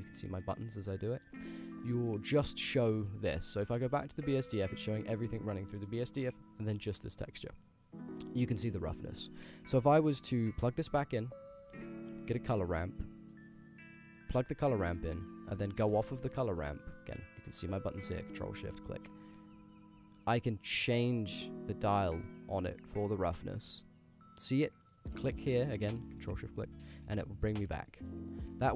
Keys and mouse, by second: 0.4 ctrl+shift+click, 1.5 middle click, 2.0 middle click, 2.6 click, 3.4 middle click, 4.0 middle click, 4.7 ctrl+shift+click, 5.8 middle click, 6.4 ctrl+shift+click, 7.0 middle click, 9.6 g, 10.7 ctrl+shift+click, 11.5 shift+a, 15.0 drag, 15.9 ctrl+shift+click, 16.5 click, 18.5 ctrl+shift+click, 18.9 click, 20.8-22.4 drag, 23.1-24.5 middle drag, 25.1 middle click, 26.3 ctrl+shift+click, 27.1-27.5 middle drag, 28.1 middle click, 28.6 shift+middle click.